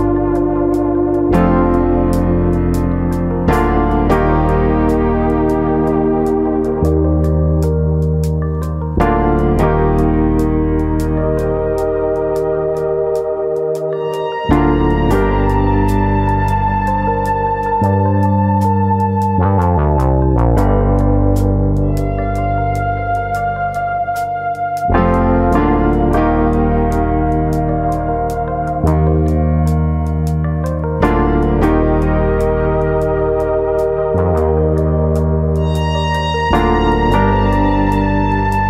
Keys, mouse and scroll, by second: 0.1 middle click, 1.6 click, 1.9 middle click, 2.7 click, 3.7 middle click, 5.1 alt+click, 5.9 alt+shift+click, 6.8 ctrl+e, 8.0 middle click, 9.9-10.4 scroll down 2, 10.2 middle click, 11.0 middle click, 11.0-11.9 scroll down 2, 11.3 middle click, 11.9 middle click, 12.8 click, 13.1 middle click, 13.8-14.4 scroll up 3, 14.1 middle click, 14.5 middle click, 15.0 click, 16.3 middle click, 17.1 middle click, 17.5 middle click, 18.0 click, 18.3 shift+click, 18.6 middle click, 19.2 click, 20.2 click, 20.4 shift+click, 20.6 middle click, 21.1 click, 21.7 middle click, 22.2 click, 22.4 middle click, 23.0 click, 23.5-24.6 scroll down 5, 23.8 middle click, 24.6 middle click, 26.1 3, 26.5 alt+click, 27.2 ctrl+KP_Add, 27.3 ctrl+KP_Add, 30.0 click, 30.9 middle click, 31.3-31.9 scroll up 1, 31.9 2, 32.1 click, 32.4 middle click, 32.9 click, 34.3 click, 34.7 click, 35.5 click, 35.9 click, 37.1 middle click, 37.4 Tab, 37.7 middle click, 37.9 middle click, 38.2 scroll up 2, 38.5 middle click.